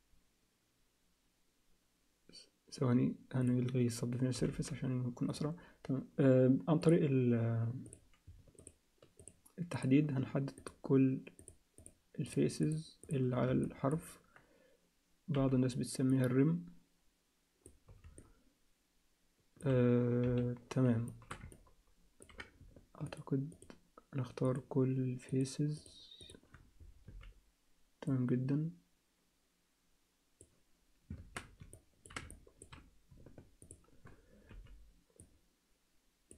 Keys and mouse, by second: 3.4 click, 4.4 g, 6.8 click, 7.9 click, 9.2 shift+click, 9.7 shift+click, 10.6-11.9 shift+drag, 12.6 shift+click, 13.0 shift+click, 13.6 alt+shift+middle click, 15.3 b, 18.2-19.6 alt+shift+middle drag, 21.1 alt+shift+middle click, 21.5 ctrl+alt+middle click, 23.5 shift+click, 24.5 shift+click, 26.2 shift+click, 27.1 b, 31.2 ctrl+z, 31.7 ctrl+alt+middle click, 32.3 alt+shift+middle click, 33.6 shift+click, 34.5 b.